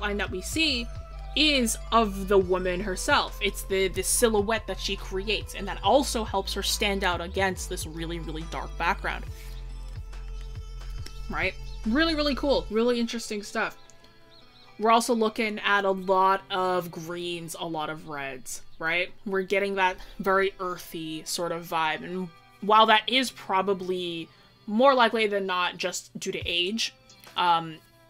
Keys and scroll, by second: 1.1 scroll, 3.4 scroll.